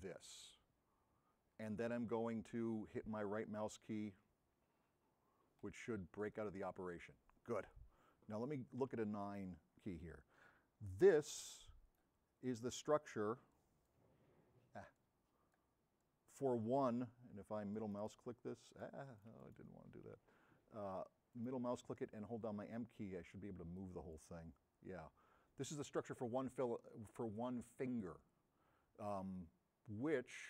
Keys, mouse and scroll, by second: 5.7 right click, 9.0 9, 11.4-12.1 middle drag, 12.5 middle click, 17.3 m, 17.8 middle click, 18.1 middle click, 18.7 middle click, 19.3 middle click, 19.5 middle click, 21.4 middle click, 22.3 m, 22.5 click, 24.2-30.4 middle drag.